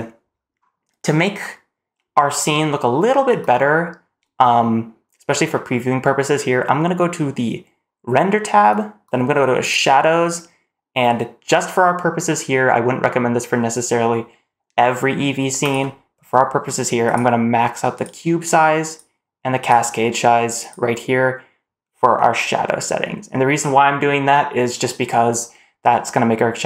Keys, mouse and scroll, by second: 0.2-1.3 scroll up 2, 1.3-3.1 scroll down 1, 9.5 click, 15.5-17.0 drag, 17.8-18.8 drag, 19.5-20.6 drag.